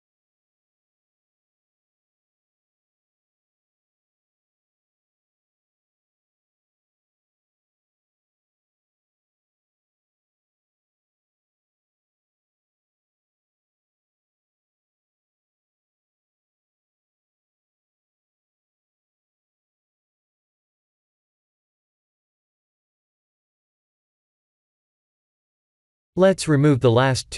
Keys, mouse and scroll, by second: 3.1 middle click, 3.4-3.9 scroll down 3, 4.7 KP_1, 7.0 shift+d, 11.3 shift+d, 13.8 g, 16.5-17.5 scroll up 7, 17.5 g, 22.0 click, 22.4-23.5 scroll down 6, 23.5 click, 23.5-23.9 scroll down 1, 23.9 middle click, 25.2 middle click, 26.1 click, 26.4 shift+click, 26.8 x.